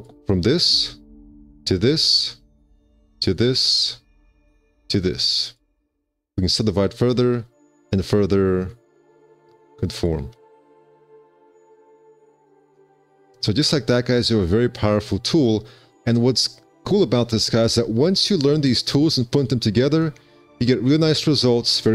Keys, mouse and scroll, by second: 7.9 alt+q, 8.9 1, 13.4 1, 13.8 q, 18.5 alt+q, 20.7 F4.